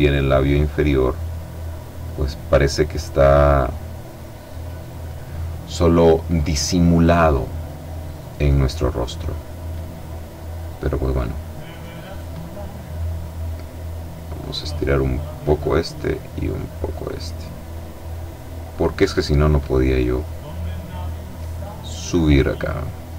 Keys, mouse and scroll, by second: 0.7 click, 2.3 click, 3.8 click, 6.3 click, 7.8-9.4 drag, 10.0-11.9 drag, 13.6 click, 15.4 click, 17.0-19.2 drag, 19.7-21.4 drag, 21.7-23.1 drag.